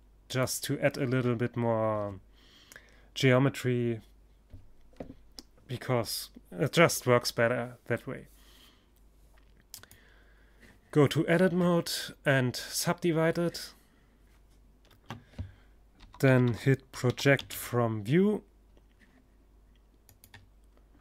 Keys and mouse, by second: 8.1-9.9 drag, 13.3 space.